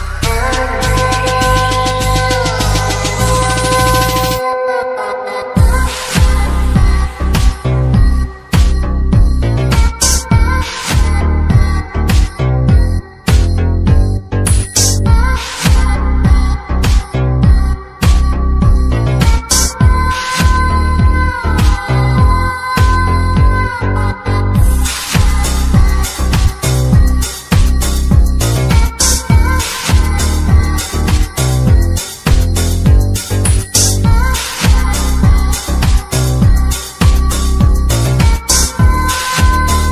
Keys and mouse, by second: 0.5-1.5 drag, 4.2-6.4 drag, 7.0-8.8 drag, 14.0 space, 17.0 click, 17.8 KP_Decimal, 18.6-19.0 middle drag, 19.3-20.8 middle drag, 22.3 shift+middle click, 24.6 space, 26.5 click, 28.1-29.3 drag, 29.8 click, 32.7-33.5 typing, 37.3 typing.